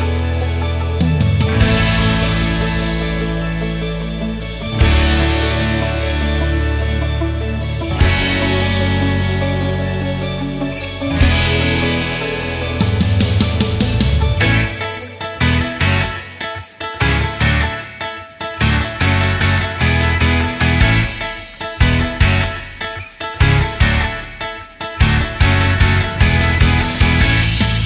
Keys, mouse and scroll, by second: 1.0 ctrl+click, 1.8 ctrl+click, 2.1 ctrl+double click, 2.3 click, 2.5 click, 2.7 double click, 2.8 click, 3.0 click, 3.1 click, 3.3 double click, 3.4 click, 3.6 ctrl+click, 4.3 ctrl+click, 4.5 double click, 4.7 click, 4.9 click, 5.1 double click, 5.3 click, 5.4 click, 5.6 double click, 5.8 click, 5.9 click, 6.1 double click, 6.7 alt+double click, 7.7 alt+middle click, 8.2-9.5 shift+right drag, 9.8 ctrl+click, 10.8 ctrl+click, 11.1 ctrl+double click, 11.5 click, 11.8 double click, 12.0 click, 12.3 click, 12.6 click, 12.8 click, 13.2 click, 13.4 double click, 13.5 click, 13.7 click, 14.1-14.5 scroll up 3, 14.7 alt+middle click, 15.0 scroll up 1, 15.4 shift+right click, 16.2-17.1 scroll down 6, 16.4 alt+middle click, 17.2 alt+middle click, 17.6 shift+right click, 20.0-21.2 scroll up 5, 22.0 scroll up 1, 22.3 scroll down 1, 22.6 scroll up 1, 23.0 scroll down 1, 24.5 scroll down 1, 25.2 scroll down 1, 25.7-27.0 scroll up 4.